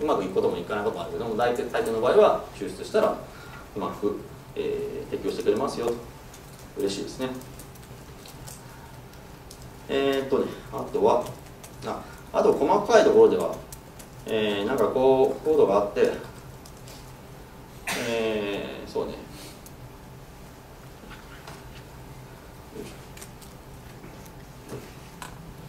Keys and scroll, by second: 19.5 super+w, 23.9 Escape.